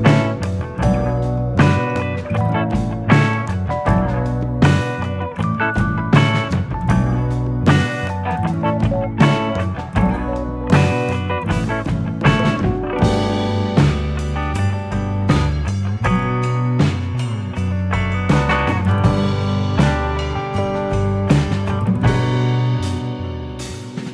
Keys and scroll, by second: 5.4 u.